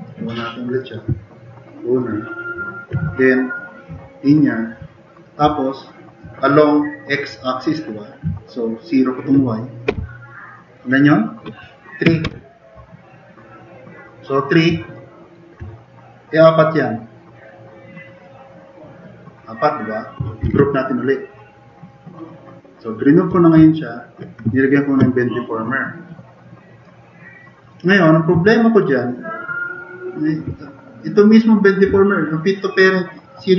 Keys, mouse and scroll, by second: 9.9 0, 10.9 click, 12.3 Return, 15.0 click, 20.4 alt+g, 28.6 drag, 28.9-29.9 drag.